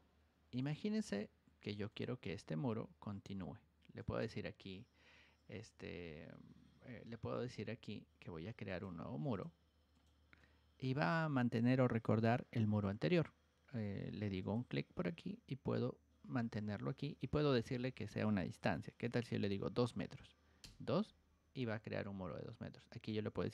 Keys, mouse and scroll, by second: 0.5 click, 1.8-8.7 drag, 3.9 right click, 7.1 Escape, 7.6 Escape, 9.3 click, 9.9 click, 14.3 click.